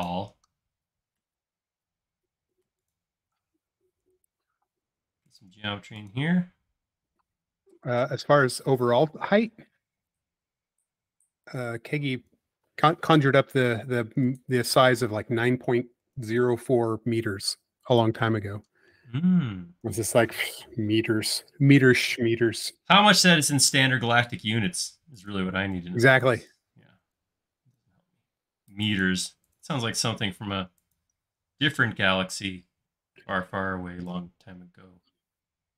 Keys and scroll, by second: 7.6 e, 11.8-12.7 typing, 14.7 Up, 17.1 e, 19.9 a, 25.6 e, 28.2 space.